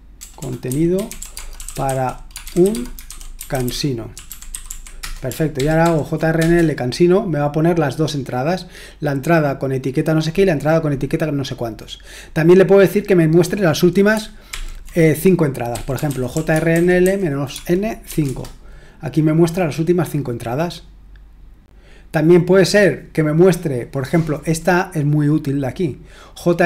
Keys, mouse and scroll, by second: 0.0-5.5 typing, 5.5 Return, 11.5-13.0 scroll down 1, 13.0-13.8 scroll down 1, 13.8-14.5 scroll down 1, 14.5 ctrl+l, 15.5-18.0 typing, 18.2 Return, 20.8-22.4 scroll down 1, 22.4-26.6 scroll down 1.